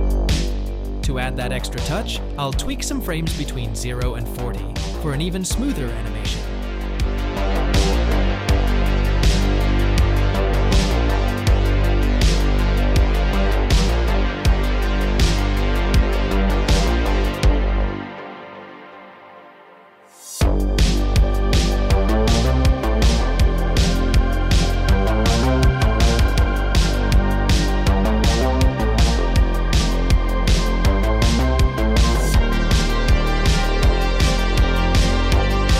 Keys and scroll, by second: 4.0 g, 5.2 g, 11.9 g, 16.9 g, 21.3 g, 26.4 space, 27.6 space, 29.4 a, 31.8 space, 34.4 space.